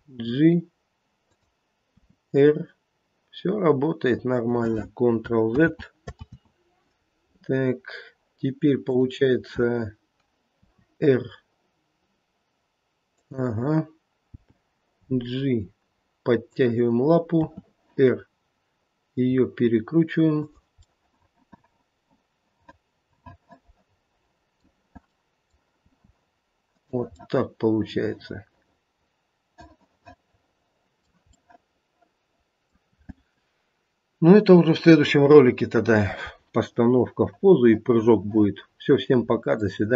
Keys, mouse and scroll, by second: 2.0 r, 5.5 ctrl+z, 6.2 ctrl+z, 7.7 scroll down 2, 8.8 click, 10.5 r, 17.3 g, 17.4 r, 21.1 middle click, 21.6 middle click, 24.4 middle click, 25.0 scroll up 1, 25.2 middle click, 25.3 middle click, 25.8 r, 27.2 middle click, 27.9 middle click, 28.4 middle click, 29.2 middle click, 29.6 middle click, 31.3 middle click, 32.4 middle click, 32.6 middle click, 36.7 middle click, 37.9 middle click, 39.5 middle click.